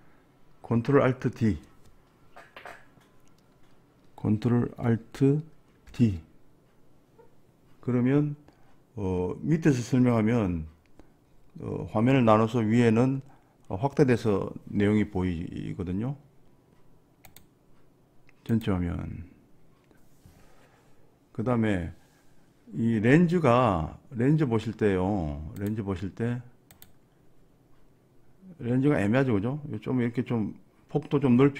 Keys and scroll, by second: 6.0 ctrl+alt+d.